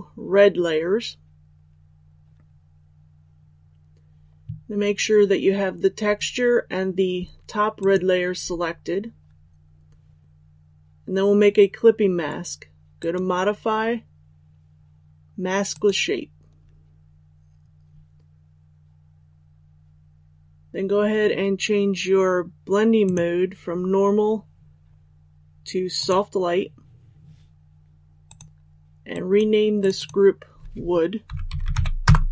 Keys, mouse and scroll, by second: 7.7 ctrl+click, 10.2 click, 32.0 Return.